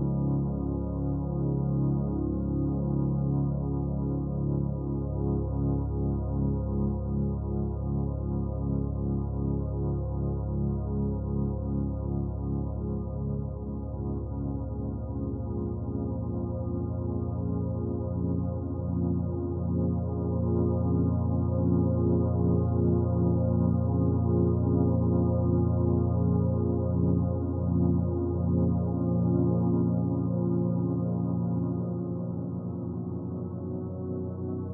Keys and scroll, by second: 18.3 ctrl+alt+shift+e.